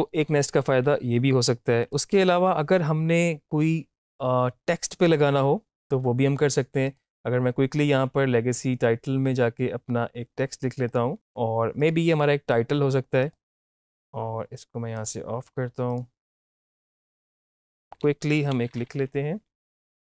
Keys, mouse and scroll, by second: 1.8 click, 2.0-2.4 typing, 6.8 click, 10.9 click, 15.0 click, 16.3-19.0 typing, 19.7 Left.